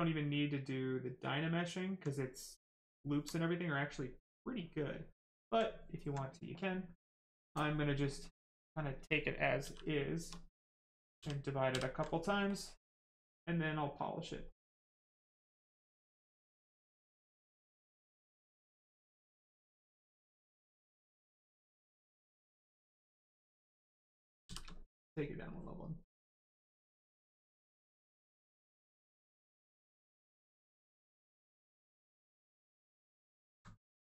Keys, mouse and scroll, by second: 1.7 alt+right click, 2.1 right click, 2.1 right click, 2.7 alt+right click, 4.5 click, 4.6 click, 5.7 alt+right click, 7.2 click, 9.6 shift+f, 11.1 ctrl+d, 11.7 ctrl+d, 12.4 click, 15.9 right click, 21.2 click, 24.4 shift+d, 25.5 click, 29.7 click, 32.7 right click, 33.5 alt+right click, 34.0 alt+right click.